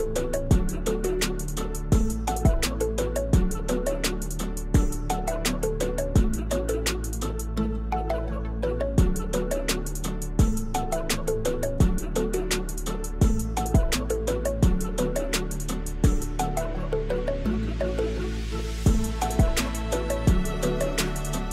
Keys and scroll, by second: 2.6 shift+z, 3.6 Tab, 4.0 ctrl+2, 5.7 Tab, 6.3 3, 8.3 Tab, 9.2 Tab, 9.6 shift+s, 10.0 Tab, 10.3 shift+a, 11.4 Tab, 13.4 3, 13.7 shift+z, 15.4 1, 18.4 e, 19.4 e.